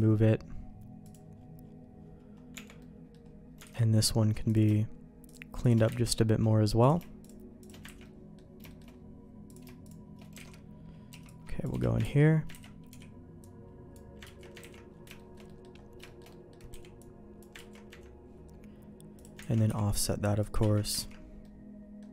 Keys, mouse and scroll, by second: 1.0-2.5 drag, 2.5 Tab, 2.8 middle click, 3.6 alt+a, 4.5 click, 5.3 shift+click, 6.0 ctrl+x, 6.1 middle click, 7.2 shift+click, 7.9 ctrl+x, 8.0 middle click, 8.7 shift+middle click, 9.5 click, 9.8 shift+click, 10.4 alt+a, 11.1 c, 12.0 ctrl+q, 12.5 ctrl+x, 12.9 b, 14.2 ctrl+q, 14.6 ctrl+x, 15.2 shift+middle click, 15.5 middle click, 16.0 shift+middle click, 16.3 middle click, 16.7 b, 17.6 ctrl+q, 19.2 click, 19.5 ctrl+x, 19.7 b, 20.7 ctrl+q, 21.0 ctrl+x, 21.4 middle click.